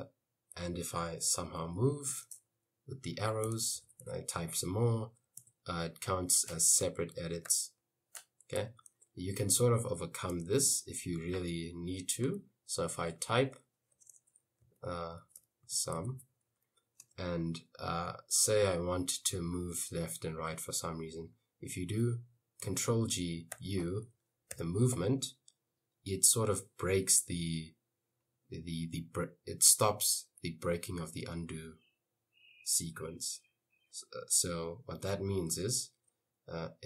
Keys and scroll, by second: 1.5 Left, 1.7 Right, 2.1 space, 3.2-4.6 typing, 5.6 Escape, 6.4 u, 8.4-9.2 typing, 12.7-17.1 typing, 23.0 ctrl+g, 23.6 u, 24.6 Left.